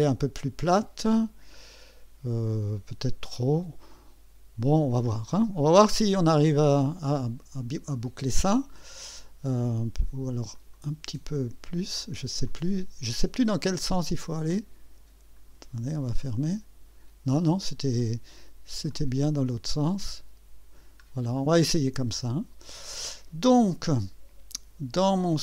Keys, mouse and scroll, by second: 3.3-5.3 drag, 5.5 scroll up 2, 6.0 right click, 6.8-8.9 drag, 10.5 click, 12.4-13.4 drag, 14.5-15.6 drag, 16.2 click, 18.9 click, 19.7 click, 21.0 scroll down 1, 21.3 scroll up 1, 21.6-23.1 drag, 23.9 scroll up 1, 25.2 click.